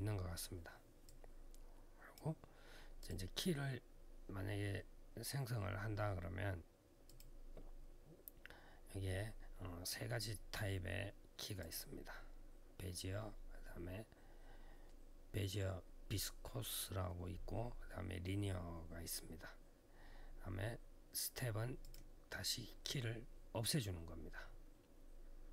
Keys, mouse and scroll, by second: 0.8 click, 2.8 click, 2.8 click, 6.8 click, 11.4 click, 21.6 click, 25.3 click.